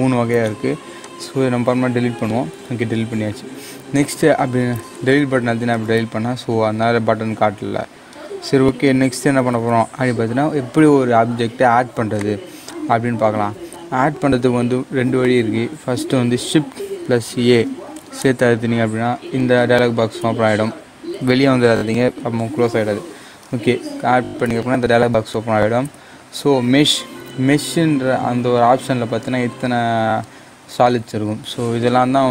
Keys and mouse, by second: 0.9 click, 12.1-17.4 drag, 17.4 shift+a, 21.1 shift+a.